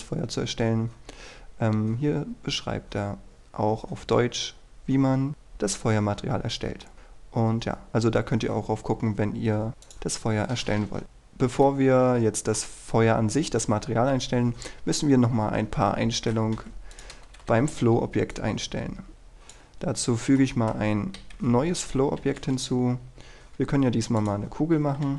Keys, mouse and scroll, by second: 0.2-2.5 scroll down 1, 6.9-7.8 scroll up 1, 10.0 click, 11.0-11.8 scroll up 1, 11.8-13.3 middle drag, 16.7 Delete, 17.1 click, 17.6-18.5 scroll down 1, 18.5 click, 19.9 scroll down 1, 20.1-20.5 scroll up 1, 20.5 middle click, 21.3 KP_1, 24.4 click.